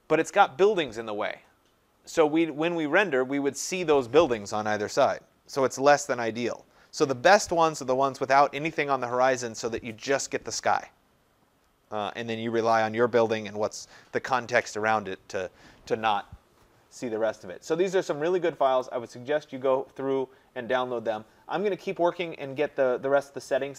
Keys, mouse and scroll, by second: 18.8 click, 22.4-22.8 scroll.